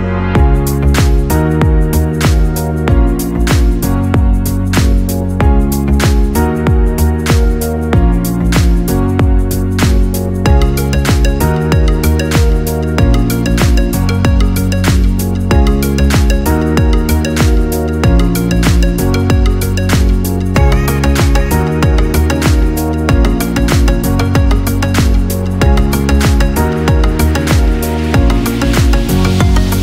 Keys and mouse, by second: 1.5 middle click, 2.1 KP_3, 2.7 shift+middle click, 3.6 right click, 4.1 right click, 4.7 right click, 5.0 KP_1, 5.7 g, 8.4 Tab, 9.2-10.6 middle drag, 10.8 KP_3, 12.1 Tab, 12.6 right click, 13.0 g, 13.7 right click, 13.8 g, 15.6-19.8 right drag, 20.3 middle click, 21.2 shift+middle click, 21.9 middle click, 22.8 g, 24.3 right click, 24.5 g, 25.1 Tab, 25.7 KP_1, 26.4-27.6 middle drag, 28.4-29.2 middle drag.